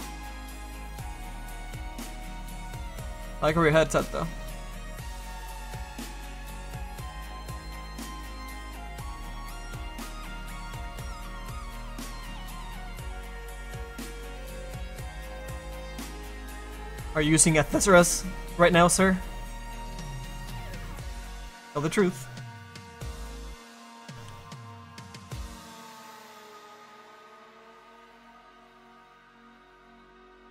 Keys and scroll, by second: 0.6 s, 2.8 ctrl+z, 13.7 s, 23.4 s, 24.0 s.